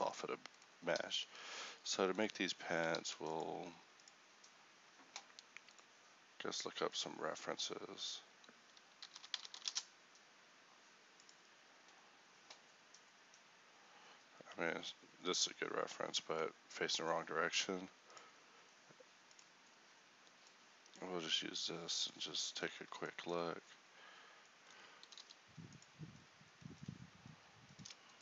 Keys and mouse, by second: 1.5 Tab, 3.1 ctrl+r, 25.1 g.